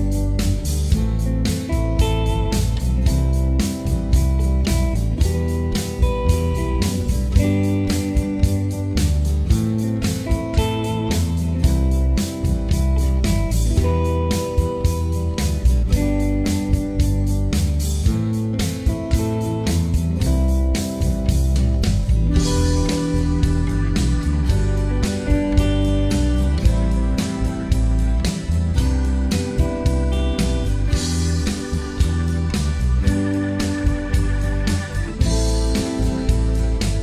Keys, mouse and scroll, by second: 0.0 alt+click, 0.6 alt+middle click, 0.8 click, 1.6 alt+middle click, 2.0 click, 2.4 alt+middle click, 2.6 scroll down 1, 2.7 alt+middle click, 3.5 click, 3.6 alt+middle click, 4.2 alt+click, 4.3 alt+middle click, 4.4 alt+click, 4.7 ctrl+right click, 5.0 alt+middle click, 5.4 click, 6.6 click, 7.3 alt+middle click, 7.4-9.2 drag, 9.2 alt+middle click, 9.5 click, 9.7 alt+middle click, 9.9 alt+click, 10.2 alt+middle click, 10.5 ctrl+right click, 10.8 f, 11.0 alt+middle click, 11.1 click, 11.4 alt+middle click, 11.6-12.6 alt+drag, 12.6 alt+middle click, 12.7 alt+click, 13.1 alt+middle click, 13.3 click, 13.7 alt+middle click, 13.9 click, 14.2 alt+middle click, 14.3 click, 14.6 scroll down 2, 14.8 alt+middle click, 14.9 right click, 15.1 alt+click, 15.5 alt+middle click, 15.6 scroll up 1, 15.7 alt+middle click, 15.9 right click, 16.1 alt+click, 16.2 scroll up 1, 16.4 right click, 16.7 alt+middle click, 17.2 click, 18.2 alt+middle click, 18.4 alt+click, 18.5 alt+middle click, 18.7-20.0 drag, 20.0 alt+middle click, 20.1 click, 20.7 ctrl+z, 20.8 click, 21.2 alt+middle click, 21.3 alt+click, 21.5 alt+middle click, 21.8 scroll down 1, 21.9 alt+click, 22.0 alt+middle click, 22.4 alt+click, 22.7 ctrl+right click, 23.3-25.0 alt+middle drag, 25.0 alt+click, 25.2 alt+middle click, 25.5 alt+click, 25.9 alt+middle click, 26.1-27.6 drag, 27.6 alt+middle click, 27.8 click, 28.2 alt+middle click, 28.6 click, 29.5 alt+middle click, 29.8-31.2 alt+drag, 31.2 alt+middle click, 31.3 alt+click, 31.4 alt+middle click, 31.5 alt+click, 31.6-32.7 alt+middle drag, 32.7 shift+right click, 33.3-34.4 drag, 34.4 alt+middle click, 35.2 f, 35.6 shift+click, 35.9 alt+middle click, 36.2 click.